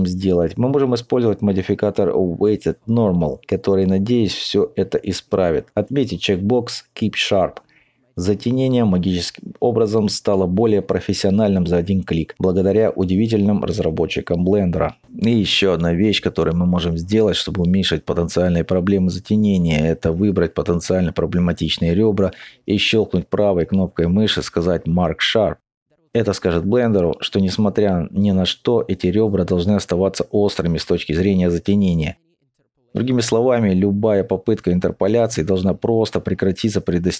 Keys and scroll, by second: 12.5 alt+;, 16.4 Tab, 16.4 2, 28.5 Tab.